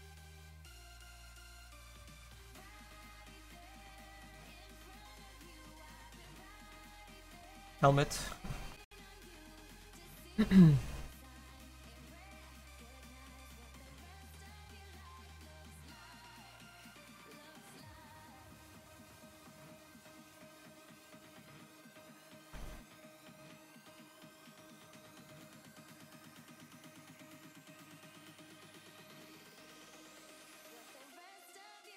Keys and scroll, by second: 2.6 `, 24.0 s, 26.9 s, 28.2 s.